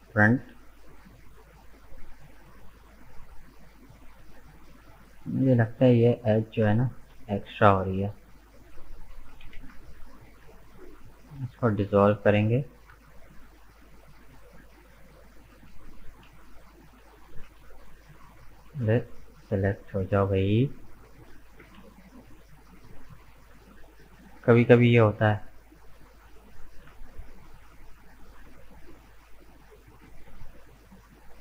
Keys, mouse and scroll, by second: 3.7 right click, 5.0 shift+right click, 6.2 shift+right click, 6.6-8.6 shift+middle drag, 8.6 shift+right click, 9.4 ctrl+z, 10.2 shift+right click, 10.5-12.5 middle drag, 12.5-13.0 scroll up 2, 13.0-14.3 shift+middle drag, 14.3 shift+right click, 15.2 shift+right click, 16.0 ctrl+z, 16.5 shift+right click, 17.3 ctrl+z, 17.8 shift+right click, 18.5 ctrl+z, 19.0 shift+right click, 19.8 middle click, 20.2-21.5 scroll up 1, 21.5 ctrl+z, 22.2 shift+right click, 23.3 shift+right click, 23.8-24.8 scroll down 1, 25.8 shift+right click, 26.4-26.9 scroll up 2, 26.9-28.9 shift+middle drag, 28.9 shift+right click, 29.2-31.4 middle drag.